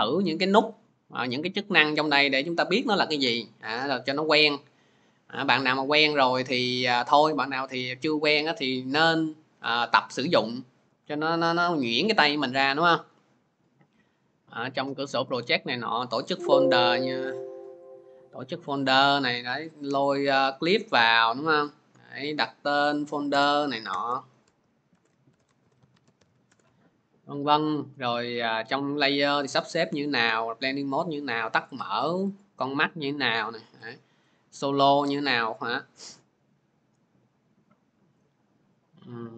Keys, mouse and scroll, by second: 13.9-18.6 drag, 20.3 click, 22.0 click, 22.6 click, 23.1 Return, 24.3-26.7 typing, 27.6 click, 28.5 click, 29.9 click, 29.9 typing, 31.8 click, 32.3 click, 33.7 click, 34.2 click.